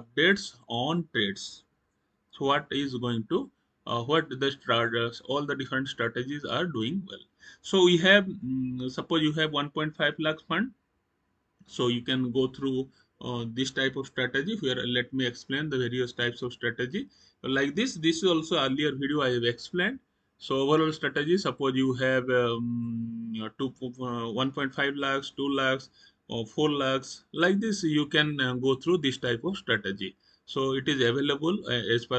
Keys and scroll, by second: 18.9 Up, 19.4 Up, 21.2 Up, 21.8 Down, 31.9 Down.